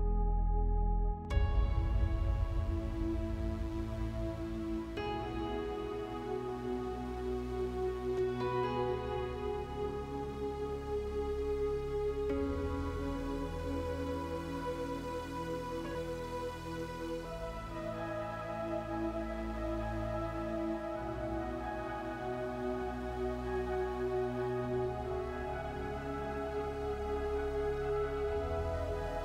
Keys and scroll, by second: 4.5 5, 5.0 Return, 8.7 7, 9.7 0, 11.1 Return.